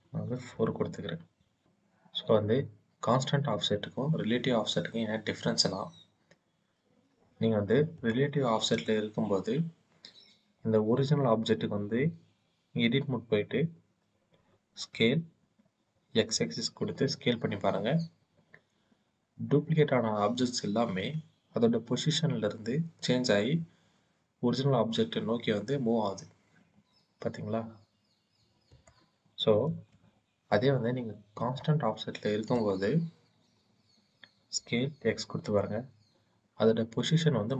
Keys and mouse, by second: 7.7 click, 8.6 click, 12.7 Tab, 14.8 s, 16.0 x, 28.5 click, 29.4 ctrl+z, 31.1 click, 32.4 click, 34.9 x.